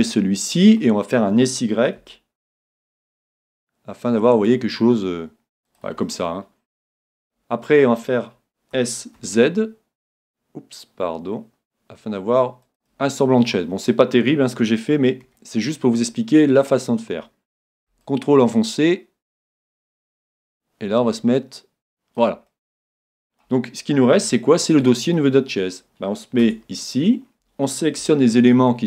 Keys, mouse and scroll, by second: 0.1-2.0 middle drag, 2.1 s, 5.8-7.6 drag, 6.0-8.0 middle drag, 8.7 s, 12.8-14.7 drag, 13.1-15.5 middle drag, 15.3 KP_1, 18.0-19.9 drag, 21.4-23.1 drag, 22.5-26.6 middle drag, 26.4 Tab, 26.9-28.8 middle drag.